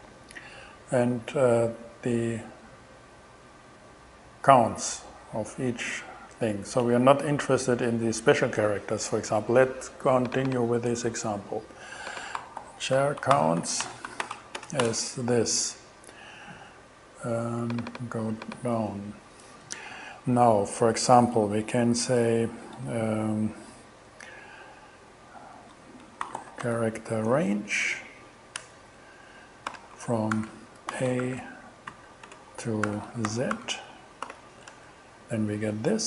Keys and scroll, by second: 12.2-15.0 typing, 26.0-27.2 typing, 28.0 Down, 28.6 Return, 29.4 alt+Return, 30.0 alt+shift+5, 30.4 alt+shift+2, 30.9-34.1 typing, 34.3 alt+shift+6, 34.7 alt+shift+Return, 35.6 shift+Return.